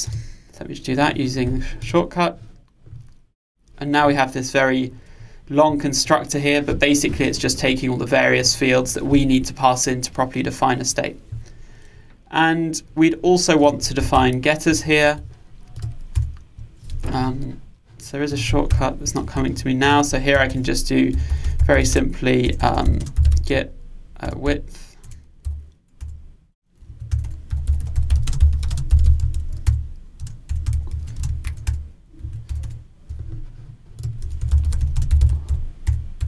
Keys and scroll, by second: 14.2 alt+Return, 26.9 Return, 35.9 Return.